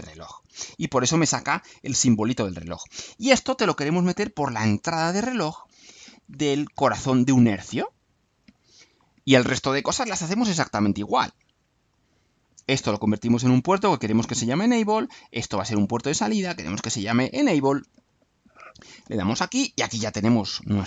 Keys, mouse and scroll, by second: 0.5 click, 3.8-4.7 drag, 5.5-8.6 drag, 10.1 click, 11.8 click, 13.0 click, 15.4 click, 16.6 click, 17.9 click.